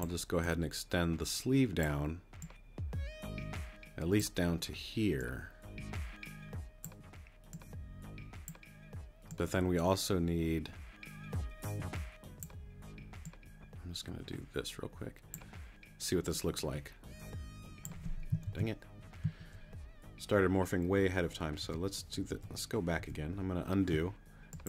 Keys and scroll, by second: 19.3 super+z, 21.6 super+z.